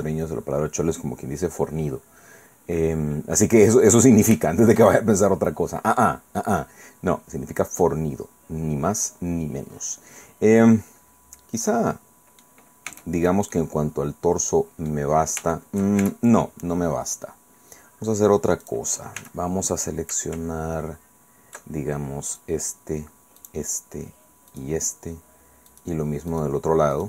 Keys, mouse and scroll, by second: 2.8 scroll down 2, 3.7-4.5 scroll up 3, 4.5 shift+middle click, 5.3-6.2 shift+scroll down 3, 6.2-7.1 scroll up 2, 7.1 scroll down 2, 7.2-7.9 scroll up 2, 7.9-8.2 scroll up 1, 8.2-9.1 scroll down 2, 9.1-9.7 scroll up 2, 9.7-10.5 scroll up 1, 10.5-11.7 scroll down 2, 11.7 click, 12.6-13.1 scroll up 2, 12.9 Tab, 13.5-15.1 drag, 15.5 shift+click, 16.0 shift+Tab, 18.6 click, 19.2 a, 22.3 shift+click, 23.4 shift+click, 24.5 shift+right click, 25.7 shift+right click, 26.3 shift+right click, 26.9 shift+right click.